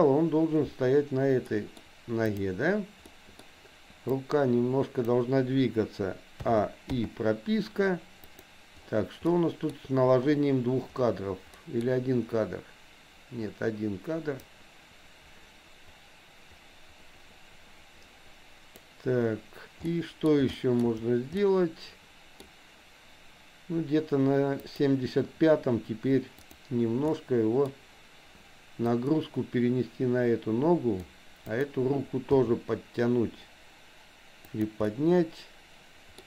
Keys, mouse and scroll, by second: 1.5 middle click, 2.2 click, 3.1 middle click, 4.2 click, 6.4 a, 7.0 i, 8.2 click, 9.2 middle click, 11.5 middle click, 14.5-19.0 drag, 19.9 middle click, 20.5 shift+middle click, 21.4-22.5 middle drag, 24.7 click, 26.4 click, 27.0 middle click, 28.9-31.2 drag, 31.5 click, 32.2 g, 34.9-36.2 middle drag.